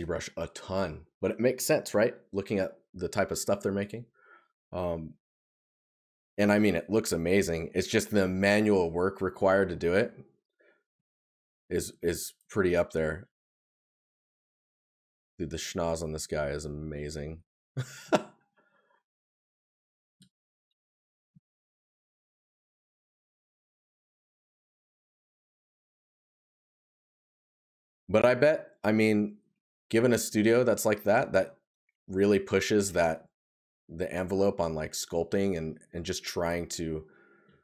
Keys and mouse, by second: 7.3 right click, 17.6 right click, 21.0 right click, 24.0 right click, 29.7 right click, 31.0 right click, 35.8 right click.